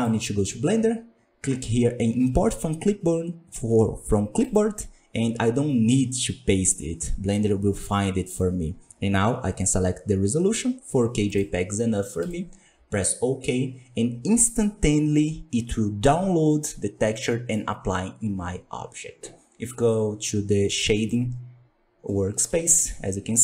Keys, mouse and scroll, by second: 4.3-7.5 drag, 17.1-17.7 middle drag, 17.7-18.5 scroll up 1, 20.8 click, 21.5-22.0 scroll up 4, 22.0-23.4 middle drag.